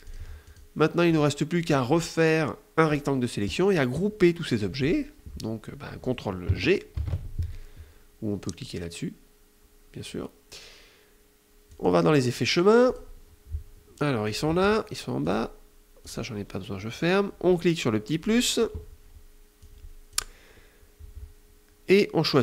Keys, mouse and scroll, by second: 0.1 click, 0.7 click, 1.3-2.7 drag, 6.6 ctrl+g, 11.3 click, 12.4 click, 14.8 click, 15.6 click, 17.8 click, 19.2 click, 22.1 click.